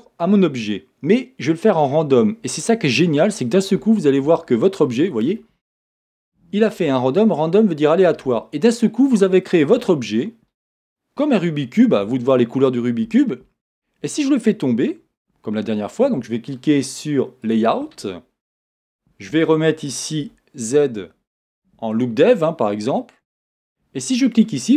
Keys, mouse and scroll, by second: 3.6 click, 6.2 shift+middle click, 11.9-17.6 middle drag, 17.6-18.7 drag, 18.7 middle click, 22.3 z, 23.0 middle click, 24.5 click.